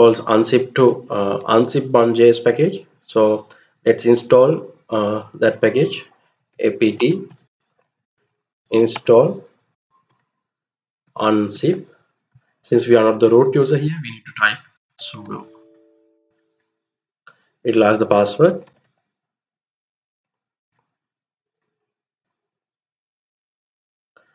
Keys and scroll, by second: 5.8-11.7 typing, 11.9-13.0 Left, 13.6-15.3 typing, 15.9 Return, 18.0-20.3 typing.